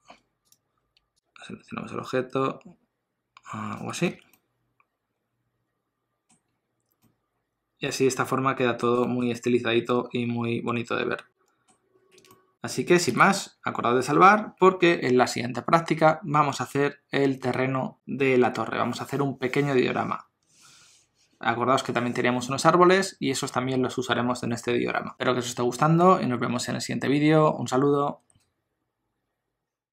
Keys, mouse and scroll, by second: 1.2 shift+click, 4.1 alt+a, 4.4 middle click, 6.5 scroll down 1, 7.0 middle click, 9.0 shift+middle click, 9.4 middle click, 12.3 ctrl+middle click, 12.5 shift+middle click, 13.1 ctrl+s.